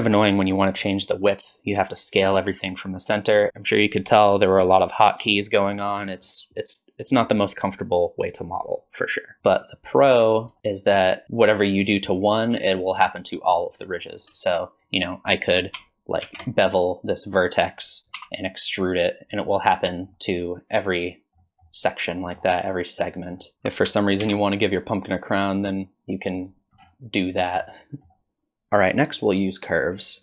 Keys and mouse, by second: 9.4 Tab, 9.5 middle click, 10.9 click, 11.5-13.5 drag, 14.1 middle click, 14.7 click, 16.3 ctrl+shift+b, 18.2 e, 20.1 middle click, 21.4 middle click, 22.3 middle click, 24.3 ctrl+b, 27.3 click, 27.8 click.